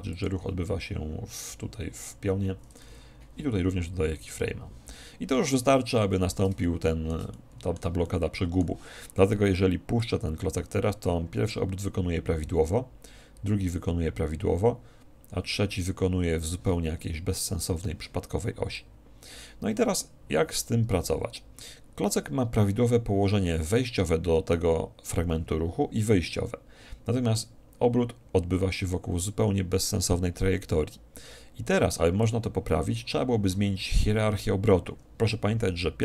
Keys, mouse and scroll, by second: 0.3-2.0 drag, 4.2 i, 6.7-10.2 middle drag, 10.2-11.9 drag, 17.1-18.9 middle drag, 18.9-20.5 drag.